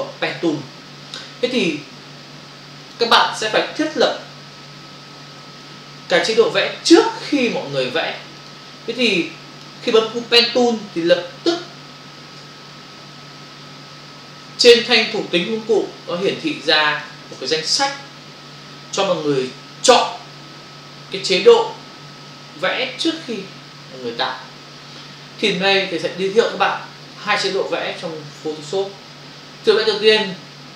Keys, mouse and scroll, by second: 2.9 click, 4.3 Print, 5.1 Return, 6.3 Return, 8.4 click, 9.2 click, 9.9 click, 11.0 f, 15.7 ctrl+click, 22.3 click.